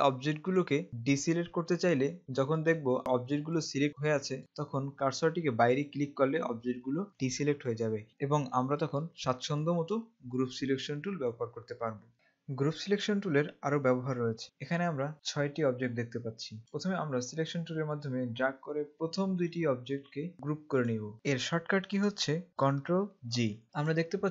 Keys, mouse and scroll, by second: 2.6 click, 8.1 click, 21.1 click, 23.4 ctrl+g, 23.9 click.